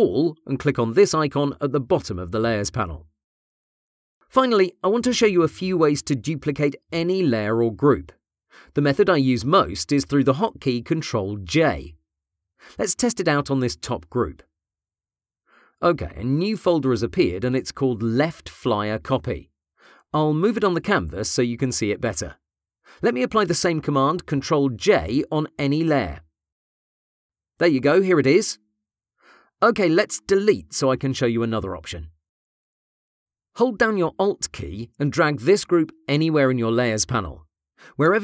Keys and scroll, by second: 14.4 ctrl+j, 26.3 ctrl+j.